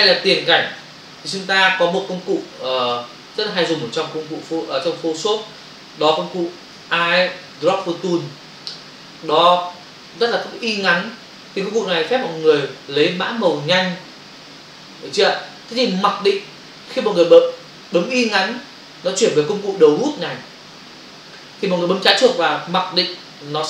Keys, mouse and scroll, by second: 0.2 f, 0.9 v, 3.0 ctrl+click, 6.2 b, 6.7 click.